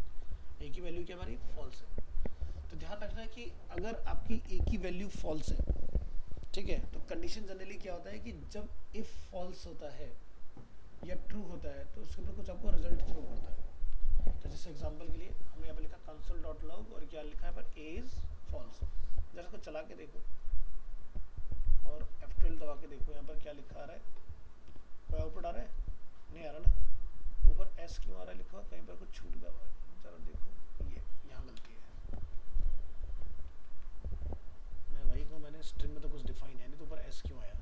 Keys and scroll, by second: 33.7 ctrl+s.